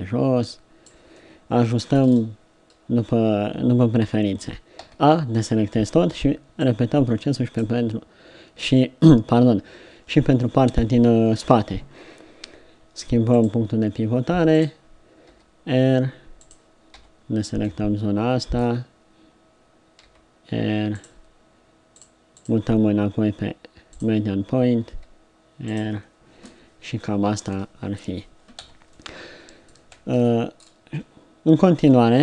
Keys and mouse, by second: 4.9 a, 6.2 b, 11.4 KP_3, 13.1 middle click, 15.3 r, 16.9 b, 20.0 r, 22.0-23.2 drag, 24.9 r, 27.5 Tab, 28.6 z.